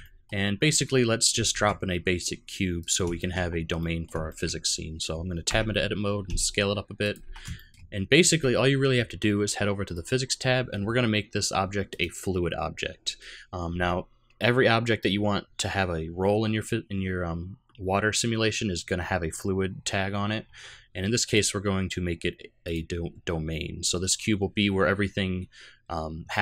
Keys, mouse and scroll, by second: 0.0 middle click, 1.5 shift+a, 3.1 shift+middle click, 3.5-4.1 scroll up 2, 3.8 middle click, 4.3 shift+middle click, 4.6-5.2 scroll down 1, 5.5 Tab, 6.3 s, 7.2 Tab, 7.6 shift+middle click, 8.0-8.5 scroll down 1, 9.9 click, 11.8 click, 21.2 click, 23.8 middle click.